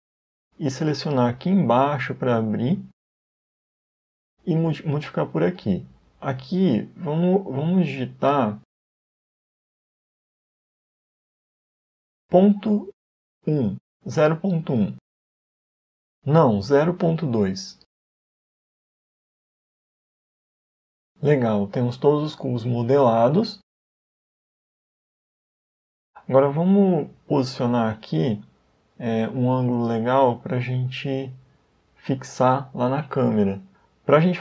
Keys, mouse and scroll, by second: 3.7 click, 6.5 click, 16.1 click, 21.0 Tab, 21.9-23.0 scroll up 3, 22.5 middle click, 25.9-26.4 scroll down 2, 26.8-27.5 scroll down 2, 27.5-27.9 scroll up 2, 28.7 scroll down 1, 33.9-34.4 scroll down 1.